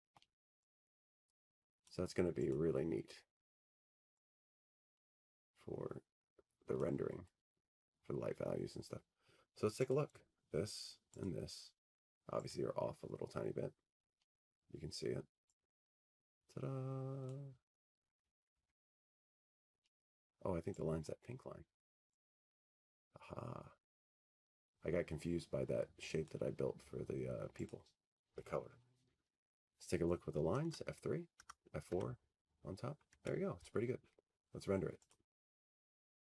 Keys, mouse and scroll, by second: 0.3-1.5 scroll, 4.1 click, 4.4-4.9 scroll, 5.9-6.8 scroll, 7.5 click, 7.7 scroll, 8.3 click, 12.3 click, 12.6-13.7 scroll, 13.7-14.5 scroll, 15.6 click, 16.8 click, 18.1 click, 18.9-20.2 scroll, 22.8 click, 24.1 ctrl+z, 25.2-25.8 scroll, 26.7 click, 31.8 click, 33.5 click, 36.2 F3.